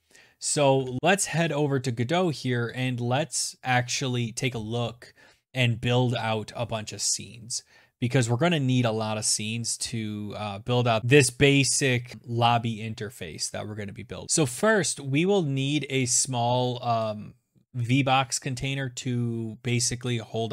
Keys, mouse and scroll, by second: 1.0 click, 1.4 click, 11.0 click.